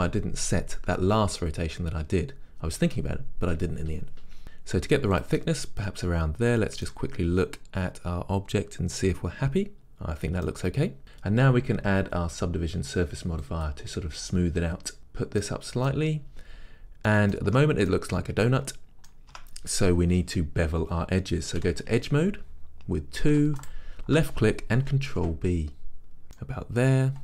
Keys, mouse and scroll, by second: 5.4-9.8 middle drag, 5.4 click, 5.8-6.6 scroll, 11.0-15.0 middle drag, 15.0 click, 15.6-19.6 middle drag, 16.6-17.2 scroll up 2, 17.6 Tab, 19.4 Tab, 21.8 2, 23.8 alt+click, 25.2 ctrl+b, 26.2 click, 26.6 middle click.